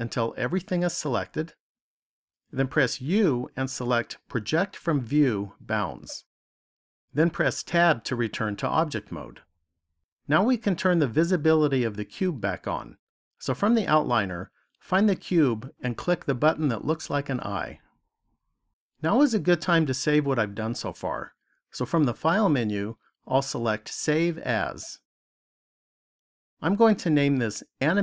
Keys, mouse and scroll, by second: 2.9 u, 7.5 Tab, 16.0 click, 22.3 click.